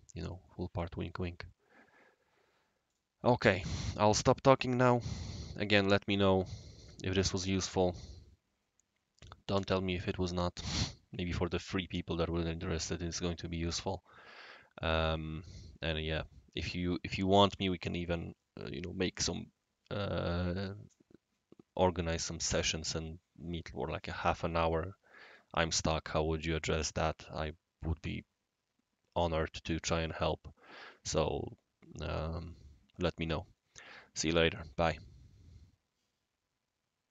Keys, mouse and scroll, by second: 0.4-1.3 right drag, 2.8 click, 11.4 click.